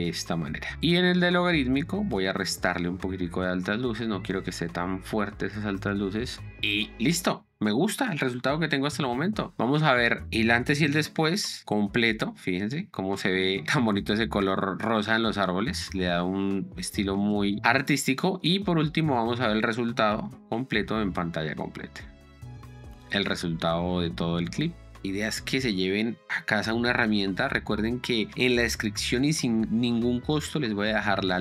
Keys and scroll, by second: 11.3 p, 11.6 space, 14.1 space, 17.6 Escape, 20.4 p, 20.8 space.